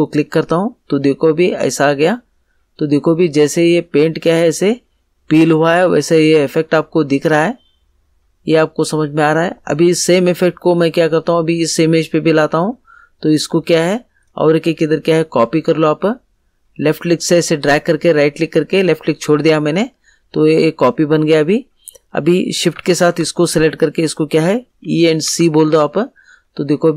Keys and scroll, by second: 24.6 e, 25.2 c.